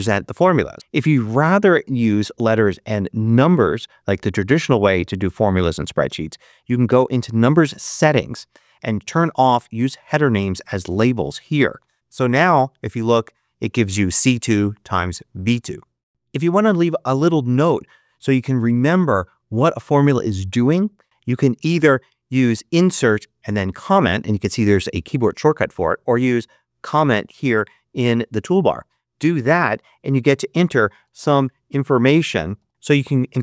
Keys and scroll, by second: 30.5-33.2 typing.